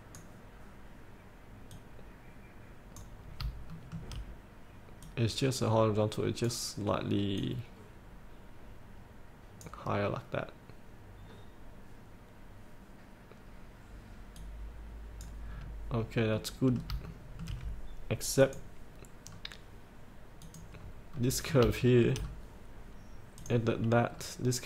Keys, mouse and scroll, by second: 0.8 click, 3.3 scroll up 1, 5.1-8.8 drag, 9.8 click, 11.3 scroll down 1, 14.5 click, 15.7-16.5 scroll up 1, 16.5 middle click, 17.3 shift+middle click, 18.6 click, 19.3 scroll down 1, 20.5 click, 20.9-21.3 scroll up 1, 21.3 middle click, 21.9 shift+middle click, 22.3-23.5 scroll down 1, 23.5 click, 24.2-24.6 scroll down 1.